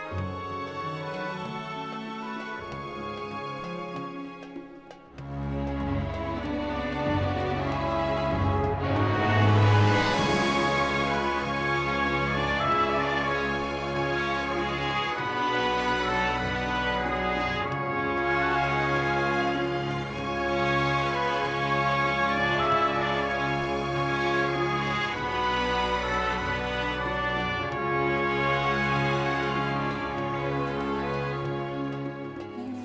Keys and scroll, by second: 6.3 2, 6.6 4, 6.8 Return, 9.2 1, 9.4 ., 9.7 3, 10.0 Return, 22.8 ..